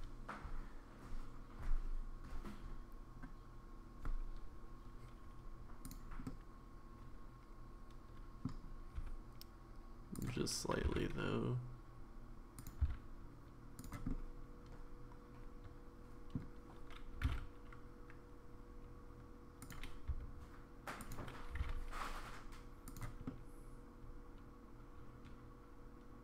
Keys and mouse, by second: 6.3-8.5 middle drag, 9.0 s, 10.9 e, 12.8 s, 14.1-16.4 middle drag, 17.4 g, 20.1 s, 21.6 g, 23.2-26.2 middle drag.